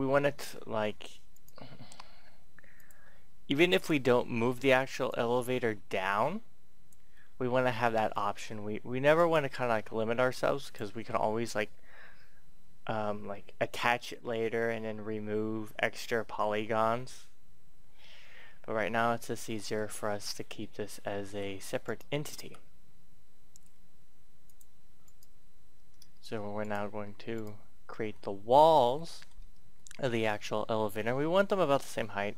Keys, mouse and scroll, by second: 0.3 scroll up 1, 1.2 right click, 2.6 click, 3.7 right click, 4.9-7.1 drag, 7.1 middle click, 7.6 scroll down 1, 8.1 middle click, 9.1 right click, 10.3 click, 11.0 click, 19.2 middle click, 19.7-20.2 scroll up 1, 20.2-20.6 scroll up 1, 21.8 right click, 22.4 right click, 24.3 click, 25.0 right click, 26.6 shift+right click, 27.3 shift+right click, 28.1 middle click, 29.7 shift+middle click, 30.3 middle click.